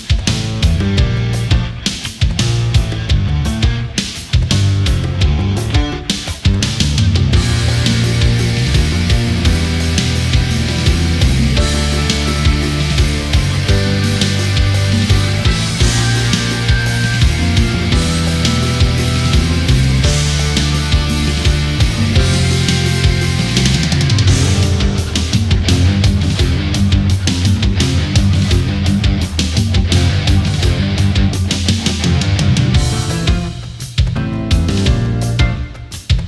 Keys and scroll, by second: 30.9 ctrl+-, 31.2 space, 32.0 ctrl+=, 32.2 space.